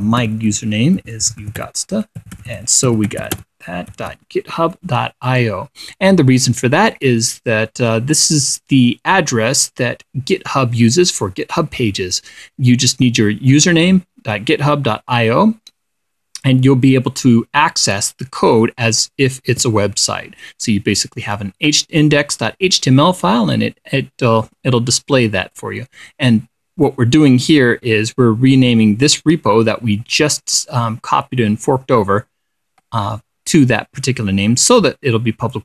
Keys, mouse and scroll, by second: 0.2-5.0 typing, 5.8 click, 7.4-20.6 drag, 20.6-22.9 scroll up 2, 34.4-34.8 scroll up 2, 35.3-35.6 scroll up 4.